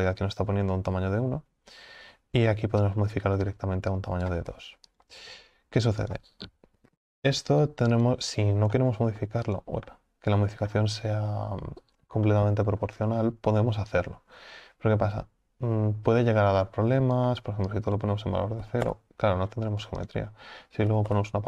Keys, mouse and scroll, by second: 7.0 Delete, 9.5 click, 9.9-10.7 middle drag, 10.7-12.3 scroll up 1, 12.3-14.1 shift+middle drag, 14.1-21.4 drag.